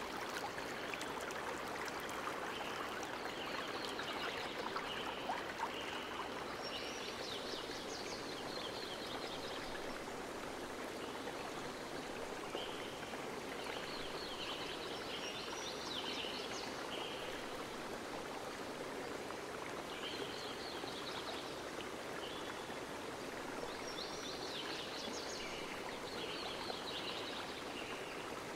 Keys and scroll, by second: 3.3 ctrl+v, 4.7 alt+Return, 10.7 Delete, 19.3 space, 26.4 space, 26.7 9.